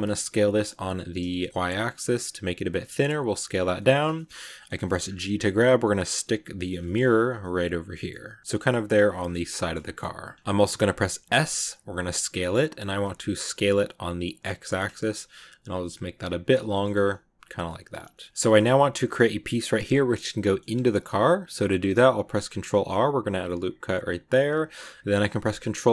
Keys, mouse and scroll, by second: 3.9-4.9 shift+middle drag, 4.9 shift+scroll up 2, 5.1 g, 6.1 middle click, 6.7 shift+scroll up 1, 6.7 shift+middle click, 7.0 g, 8.0 middle click, 8.5 g, 9.0-10.2 shift+middle drag, 10.2 scroll down 1, 10.3 middle click, 10.4 scroll up 1, 11.2 s, 16.6 shift+middle click, 16.9 g, 17.5 middle click, 17.9 g, 18.3 middle click, 18.5-18.9 scroll up 2, 18.9-20.6 middle drag, 20.6-21.2 scroll up 2, 21.2 middle click, 21.9 ctrl+r, 25.2 ctrl+r.